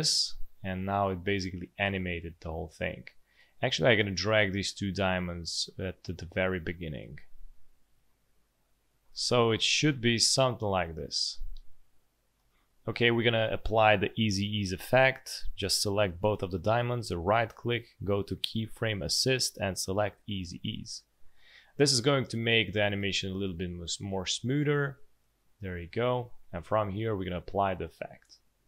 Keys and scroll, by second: 9.7 space, 12.3 space, 22.9 space, 25.8 space.